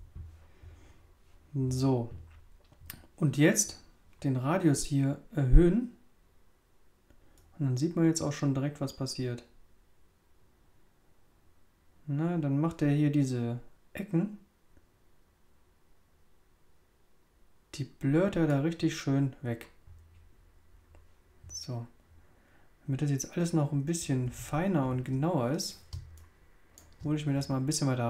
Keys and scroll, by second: 24.2 super++, 25.9 super+space.